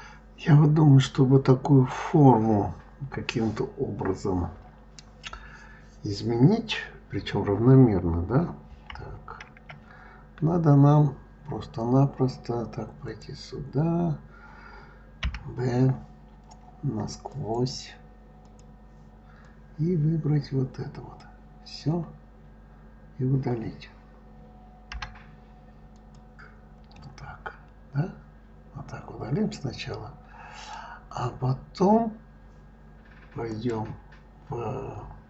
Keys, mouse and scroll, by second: 8.7 KP_3, 9.3 KP_1, 10.0-10.5 scroll up 2, 10.8-12.9 scroll down 4, 12.9 click, 15.0 b, 18.2 click, 19.2 click, 22.0-23.0 scroll up 3, 24.7 d, 26.7-29.8 middle drag, 30.7-31.8 scroll down 2, 33.3-35.2 drag.